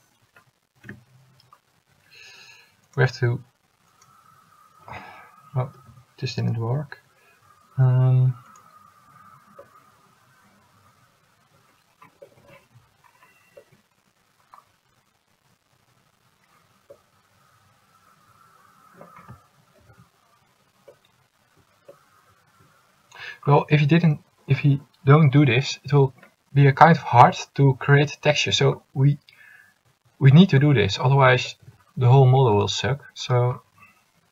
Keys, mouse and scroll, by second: 1.0 u, 5.9 ctrl+z, 6.8 u, 20.0 ctrl+z.